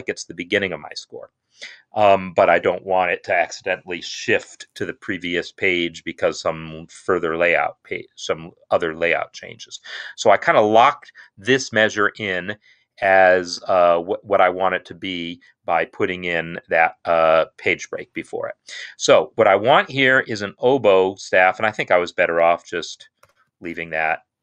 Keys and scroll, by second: 23.4 ctrl+0.